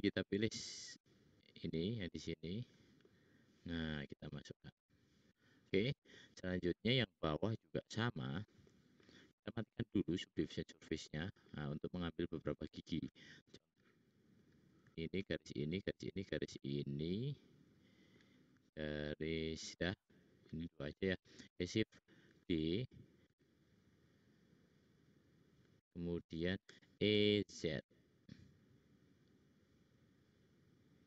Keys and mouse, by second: 0.4 click, 1.5-2.5 drag, 2.8 middle click, 3.7 middle click, 4.5 middle click, 5.0 middle click, 5.2 middle click, 6.0 middle click, 9.7-10.4 middle drag, 12.4 click, 13.5 click, 13.5 right click, 15.5 shift+click, 16.0 shift+click, 22.3 shift+d, 26.6 e.